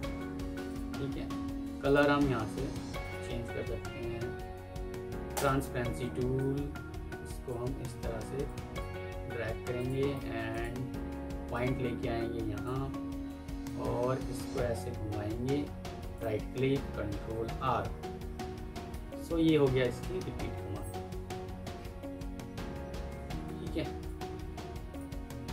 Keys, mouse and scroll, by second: 2.9 alt+click, 15.9 right click, 17.0 ctrl+r, 17.2 ctrl+r, 17.4 ctrl+r, 17.6 ctrl+r, 17.7 ctrl+r, 18.0 ctrl+r, 18.1 ctrl+r, 18.4 ctrl+r, 18.6 ctrl+r, 18.8 ctrl+r, 18.9 ctrl+r, 19.1 ctrl+r, 19.3 ctrl+r, 19.5 ctrl+r, 20.4 ctrl+r.